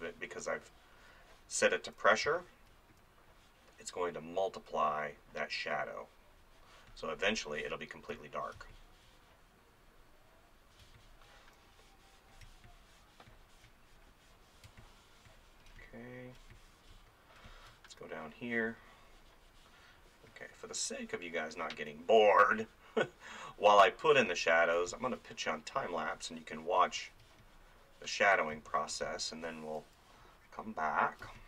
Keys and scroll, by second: 2.3 space, 8.1 ctrl+z, 8.6 space, 10.9 space, 12.4 space, 14.7 space, 17.9 [, 21.9 [, 24.8 space, 26.8 space, 28.5 space, 31.2 space.